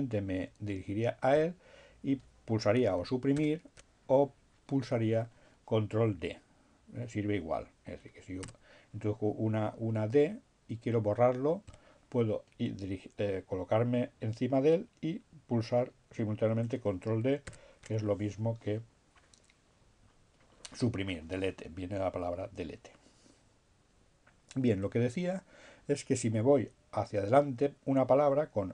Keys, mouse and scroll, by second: 2.7 Delete, 7.0 d, 11.2 BackSpace, 15.9 ctrl+d, 28.3 alt+f.